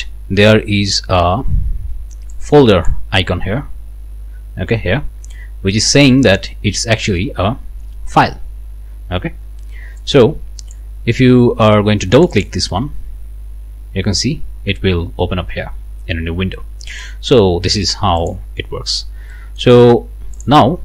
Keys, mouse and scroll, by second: 2.4 click, 10.0 click, 12.1 click, 13.9 scroll down 2, 16.9 click, 18.2 click, 19.3 click, 20.3 click.